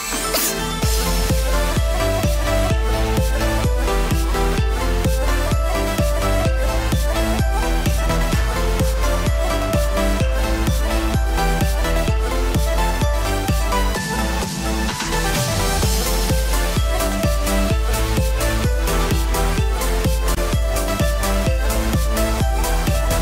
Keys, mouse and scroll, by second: 4.3 click, 6.5 alt+click, 7.7 s, 10.8 KP_3, 11.8-12.5 scroll up 1, 12.5 scroll up 2, 14.1 click, 14.5 alt+click, 15.2 click, 18.1 click, 19.4-20.2 scroll down 3, 20.2-20.8 scroll up 3, 20.8 alt+click, 21.5 click, 22.7 scroll down 4, 22.9 alt+a.